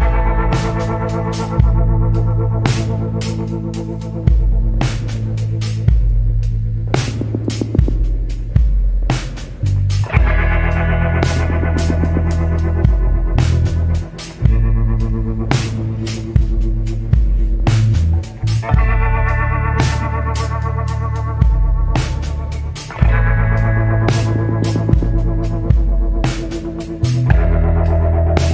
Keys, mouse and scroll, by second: 0.1 scroll down 1, 1.4 scroll up 1, 6.0 scroll up 1, 10.3 scroll down 1, 12.4 scroll up 1, 14.8 scroll up 1, 25.7 scroll down 1, 27.5-27.8 scroll down 1.